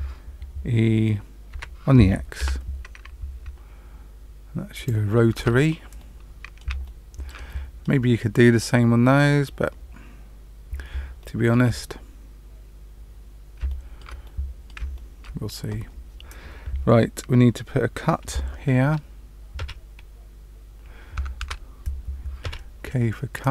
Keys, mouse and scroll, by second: 1.5 e, 5.3 Tab, 5.9 middle click, 6.8 shift+middle click, 7.4 middle click, 10.4-10.9 scroll up 1, 11.1 shift+middle click, 13.6 shift+middle click, 14.2 middle click, 14.9 shift+middle click, 19.5 k, 21.3 Tab, 22.4 k.